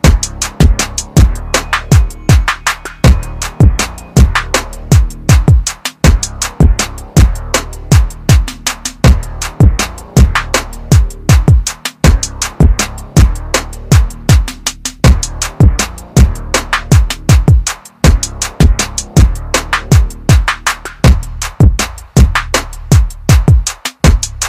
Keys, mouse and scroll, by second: 0.5 click, 2.8 shift+click, 4.9 click, 11.4 shift+click, 12.2 shift+click, 13.4 click, 17.6 scroll up 1, 19.5 click.